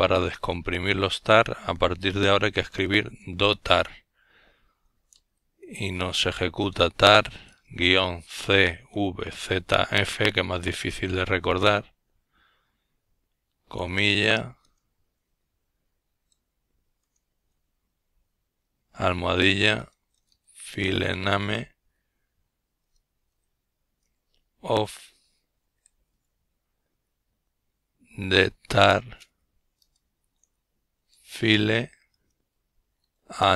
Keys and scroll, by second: 0.0-0.5 typing, 2.0-4.3 typing, 11.4 typing, 13.7-16.2 typing, 17.7-18.3 typing, 19.7-20.9 typing, 22.7-33.5 typing.